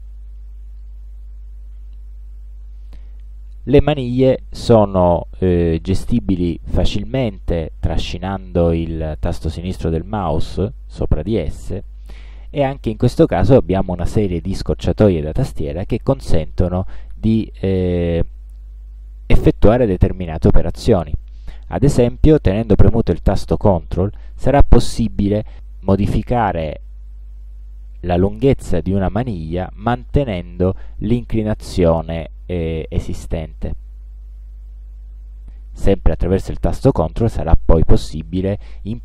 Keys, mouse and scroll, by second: 0.6-3.6 drag, 5.9-8.9 drag, 16.4-19.7 drag, 24.0-35.0 ctrl+drag, 35.9-39.0 ctrl+drag.